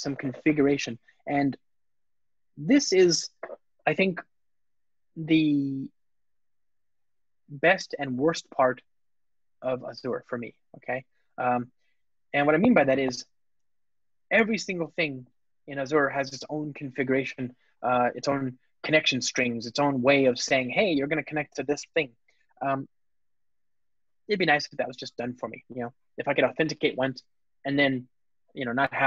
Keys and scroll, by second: 4.6 shift+super+o, 8.8 super+v, 13.5 super+/.